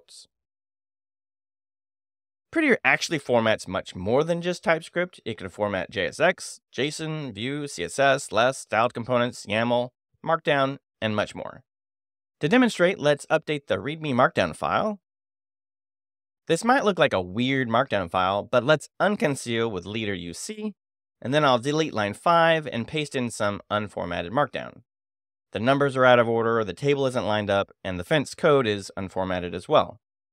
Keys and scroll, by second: 13.2-14.2 typing, 14.7 Return, 19.2 space, 19.6 u, 19.9 c, 21.9 4, 22.0 j, 22.6 d, 23.5 shift+o, 24.4 super+v.